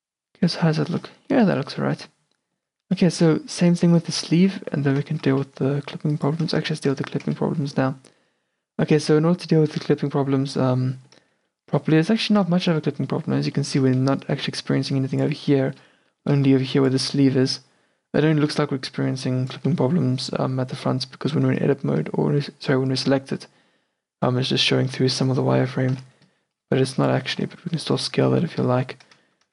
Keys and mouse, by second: 1.6-3.5 middle drag, 2.8 q, 4.1 Tab, 4.7 middle click, 4.8 middle click, 5.3 middle click, 6.2 click, 6.8 a, 7.4 Tab, 11.3 Tab, 12.0 Tab, 12.6 a, 13.1 middle click, 13.5 a, 14.1 d, 14.3-16.2 middle drag, 15.3 d, 15.6 d, 16.5 d, 16.6-18.6 middle drag, 17.0 d, 18.2 d, 18.6 d, 18.8 middle click, 19.7 d, 19.9 d, 21.6 Tab, 22.0 Tab, 26.0 n, 27.1-29.4 drag, 27.5 n, 28.2 Tab, 28.7 a.